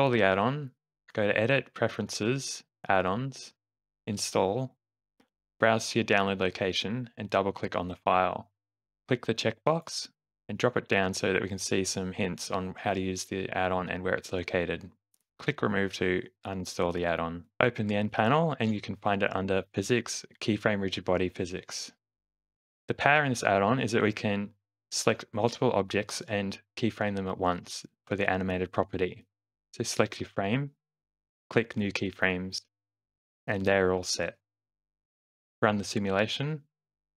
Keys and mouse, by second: 0.8 click, 17.6 n, 17.7 click, 22.4 space, 23.7 space, 24.1 shift+Left, 25.3 click, 27.2 shift+g, 31.1 click, 34.8 click, 35.6 shift+Left, 36.1 space.